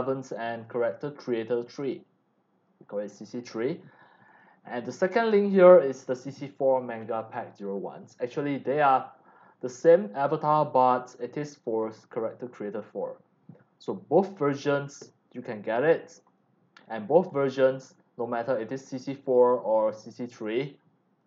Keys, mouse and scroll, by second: 1.5 click, 4.2 click, 6.4 click, 8.0 click, 13.7 click, 16.2 click, 16.7 click, 17.3 click, 18.7 click, 19.8 click.